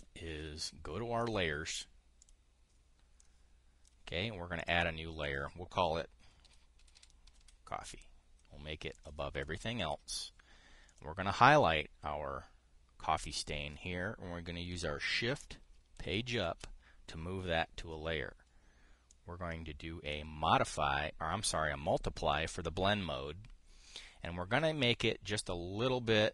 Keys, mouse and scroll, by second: 0.6 click, 1.9 click, 2.9 click, 3.8 click, 5.3 click, 6.8-8.5 typing, 9.6 click, 11.6 click, 16.7 shift+Page_Up, 17.4-26.3 drag.